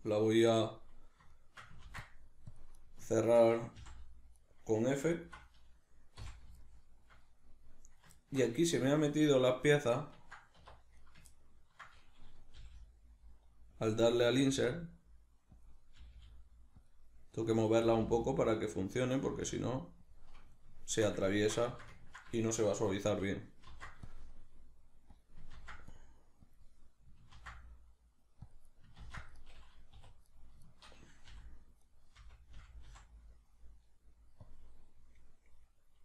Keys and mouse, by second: 0.7 click, 1.3-2.7 shift+middle drag, 1.8 ctrl+r, 2.6 click, 2.7 right click, 3.1 shift+right click, 3.8 f, 4.4 right click, 5.1 alt+right click, 6.2 f, 6.6-11.0 shift+middle drag, 10.6 1, 11.0 right click, 11.3-12.6 ctrl+middle drag, 12.6 g, 13.9 click, 14.1 right click, 14.3 g, 15.7 click, 16.0 g, 16.9 click, 17.6 right click, 17.9 g, 18.9 click, 19.3 g, 20.1 click, 20.7-25.3 middle drag, 23.7 ctrl+r, 25.3 click, 25.5 ctrl+r, 26.5 click, 27.3 ctrl+r, 28.8 right click, 29.0 ctrl+r, 29.5 right click, 29.9 2, 30.3 right click, 30.7 shift+right click, 31.3 f, 31.8 right click, 32.2 f, 34.5 click, 35.2-36.0 middle drag.